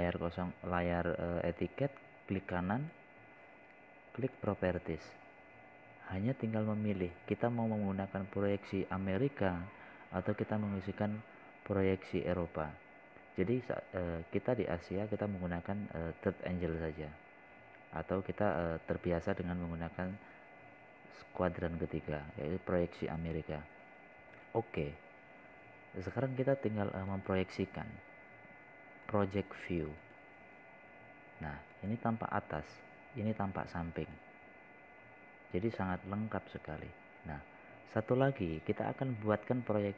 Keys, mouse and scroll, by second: 3.0 right click, 5.8-11.1 drag, 28.6 scroll down 1, 30.1 click, 39.2 scroll down 1, 39.6 scroll up 1.